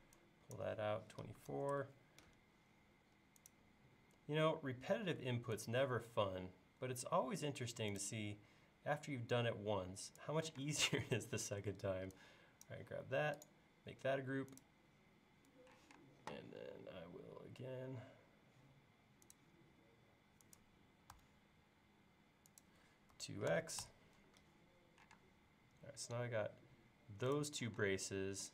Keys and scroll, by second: 1.2-2.0 typing, 10.6 space, 15.8 q, 23.1 2, 23.5 x, 25.2 space, 27.8 space.